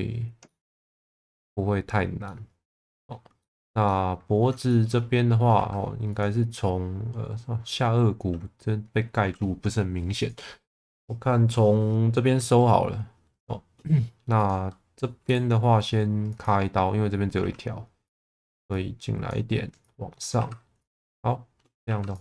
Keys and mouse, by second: 0.4 middle click, 0.8 ctrl+s, 1.2 middle click, 2.2 middle click, 3.4 shift+middle click, 3.8 alt+middle click, 4.7 shift+middle click, 5.5 2, 14.3 click, 17.4 1, 18.1 click, 18.7 click, 19.9 click, 20.3 2, 20.8 click, 21.8 2.